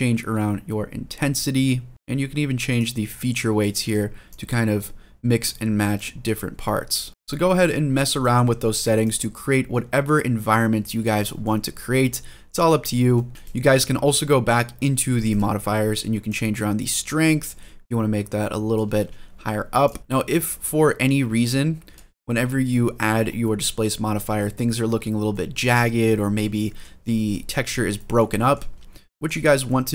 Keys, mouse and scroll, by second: 1.9-2.6 middle drag, 2.6-3.7 drag, 4.1-5.2 drag, 5.7 click, 7.1 scroll up 2, 7.2 middle click, 7.7 scroll down 1, 8.0 middle click, 8.8-11.0 drag, 11.2-12.5 middle drag, 12.6 scroll down 1, 12.9 middle drag, 15.0 click, 16.0-18.5 drag, 18.8 ctrl+z, 19.6-20.4 drag, 21.9-22.6 scroll up 4, 22.6 middle click, 23.0 scroll down 2, 23.4 middle drag, 23.9 scroll down 2, 24.2 middle drag, 24.6-25.0 scroll up 3, 25.1-25.4 shift+middle drag, 25.6 middle drag, 26.4 middle drag, 26.8 scroll down 1, 27.1 middle drag, 27.7 middle drag, 28.2 shift+middle drag, 28.5 scroll up 1, 28.9 shift+middle drag, 29.2-29.8 scroll up 3, 29.8 middle drag.